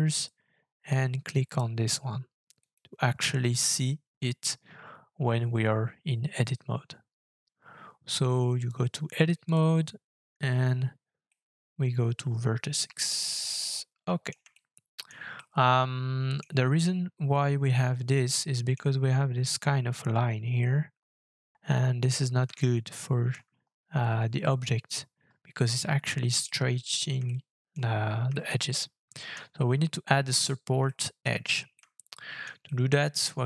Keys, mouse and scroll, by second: 11.2 middle click, 14.5 shift+scroll up 1, 14.5 shift+middle click, 15.4 middle click, 18.4 middle click, 20.6 middle click, 22.2 scroll up 4, 22.6 shift+middle click, 23.6-25.1 shift+scroll up 1, 25.1-26.4 scroll down 2, 26.4 middle click, 27.2 shift+middle click, 28.3 shift+middle click, 29.6 middle click, 30.8 shift+middle click, 31.4-31.7 scroll down 1, 31.7 middle click, 31.9 scroll down 1, 32.4 scroll down 2, 32.6 shift+middle click.